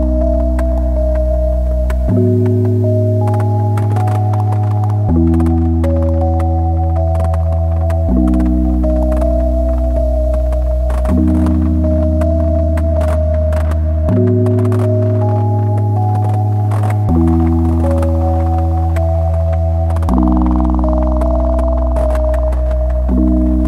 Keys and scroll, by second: 0.2 `, 1.5 /, 3.4 \, 6.4 Tab, 7.3 `, 7.9 /, 9.3 `, 14.8 a, 18.9 a, 22.0 `.